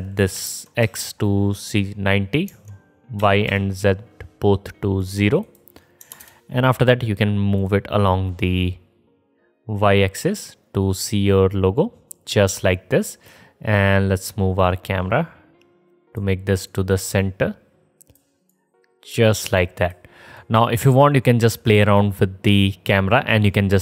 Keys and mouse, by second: 3.7 Tab, 5.6-8.6 drag, 5.6-8.6 middle drag, 5.6-8.6 right drag, 11.0-14.1 drag, 11.0-14.1 middle drag, 11.0-14.1 right drag, 17.4-21.4 middle drag, 21.7-23.8 drag, 21.7-23.8 middle drag, 21.7-23.8 right drag.